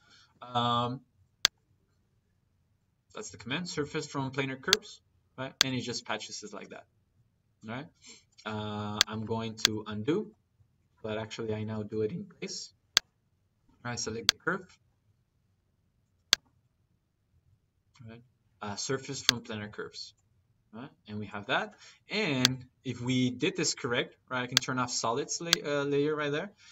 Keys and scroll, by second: 10.0 ctrl+z, 12.2 Escape.